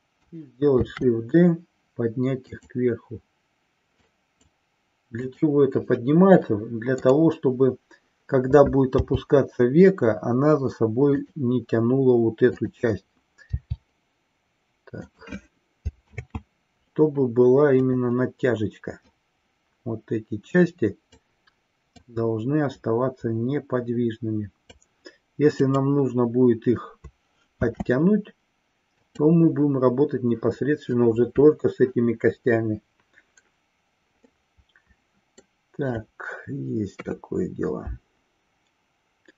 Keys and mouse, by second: 0.9 shift+d, 4.0 click, 5.5 click, 7.1-7.5 drag, 9.0 g, 11.4 click, 12.6 click, 15.2 click, 16.2 ctrl+z, 17.8 click, 19.1-21.4 drag, 22.1 click, 25.8-26.2 drag, 27.6 shift+d, 29.2 click, 34.4-35.6 middle drag, 36.8 KP_3.